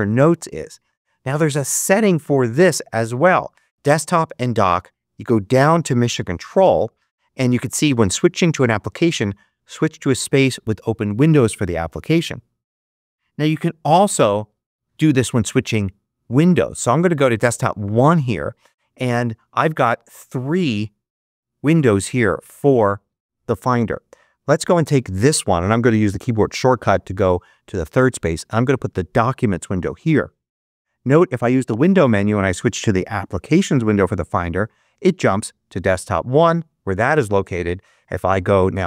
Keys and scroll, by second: 14.4 ctrl+Up, 26.4 ctrl+Right.